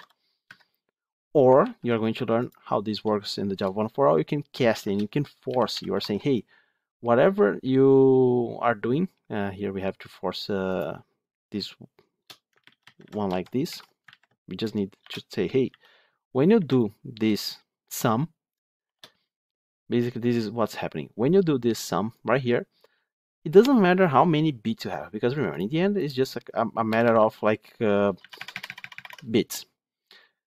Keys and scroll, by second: 0.3 Escape, 1.5 ctrl+z.